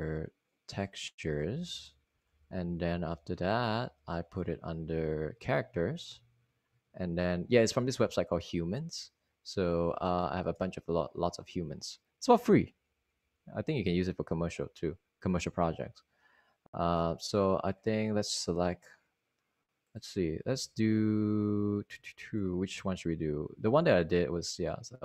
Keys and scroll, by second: 4.1 Down, 4.4 Down, 4.9 Right, 5.3 Down, 5.4 Down, 5.6 Down, 5.7 Down, 6.1 Down, 6.2 typing, 7.6 Up, 7.8-8.7 typing, 9.2 Right, 9.9 Right, 10.8 Left, 14.4 Down, 15.1 Down, 15.7-18.0 typing, 20.7 Return, 23.5 Return, 24.1 typing.